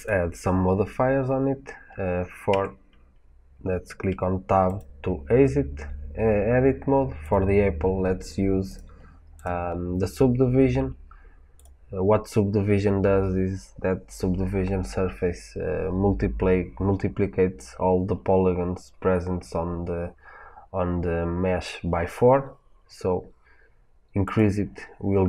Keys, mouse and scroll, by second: 2.4 Tab, 4.6 click, 7.1 click, 8.6 click, 9.3-25.2 drag.